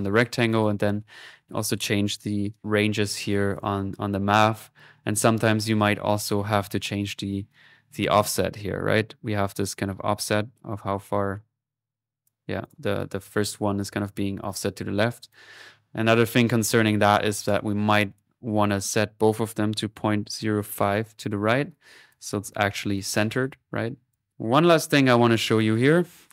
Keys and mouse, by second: 0.6-1.7 drag, 1.8 click, 3.5 click, 4.3 click, 5.8 click, 7.3-12.3 drag, 12.4 click, 13.2 typing, 15.1-17.2 drag, 17.2 right click, 18.1 click, 18.8 click, 21.9 click, 22.2-24.2 typing, 22.3-23.6 drag, 23.9 middle click, 24.1 click, 24.8 middle click, 25.1-26.2 drag.